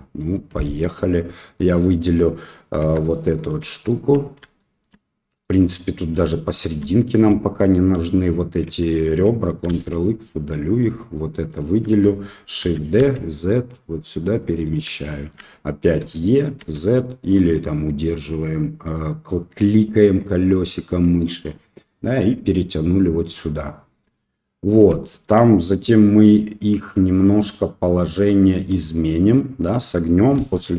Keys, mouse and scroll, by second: 1.4 click, 2.8 2, 3.2 click, 4.5 shift+click, 5.4 click, 6.4 shift+click, 9.6 ctrl+x, 10.8 click, 12.7 shift+d, 15.0 shift+middle click, 16.0 e, 23.7 middle click, 30.3 KP_1.